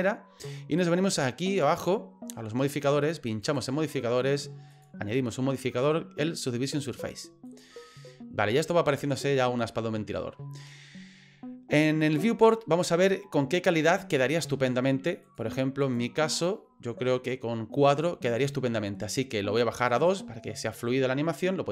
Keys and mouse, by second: 3.5 click, 4.7-7.6 drag, 15.9 click, 16.3 click, 19.8 click, 20.0 click.